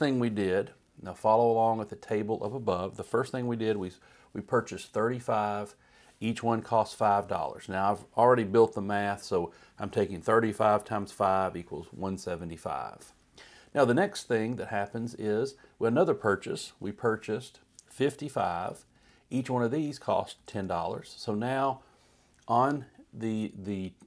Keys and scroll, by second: 3.0-3.8 typing, 5.3 Right, 6.6 5, 7.3 Right, 13.7 Left, 14.6 Down, 18.1 5, 20.0 Right, 20.5 0, 21.1 Right.